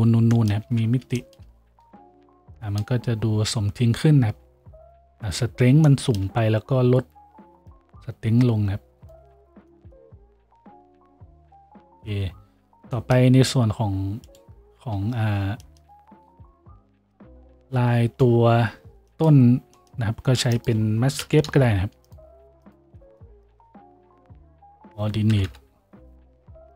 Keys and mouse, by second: 10.9 a, 20.4 shift+a, 24.5 shift+a, 25.5 t.